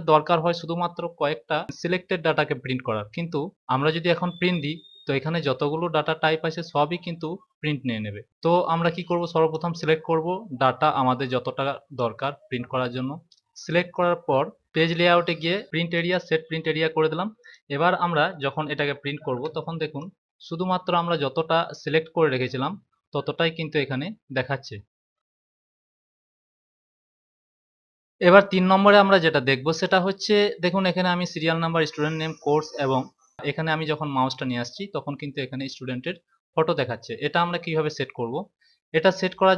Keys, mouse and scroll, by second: 9.4 click.